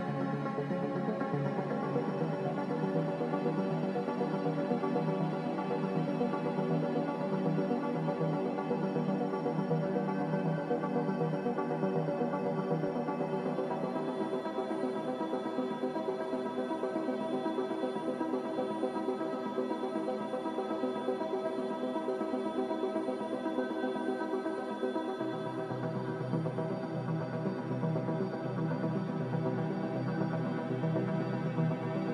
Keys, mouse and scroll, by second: 4.7 Delete, 7.4 Delete, 8.4 Delete, 9.7 Delete, 12.3 Delete, 13.1 Delete, 17.6 Delete, 18.5 Delete, 25.4 Delete.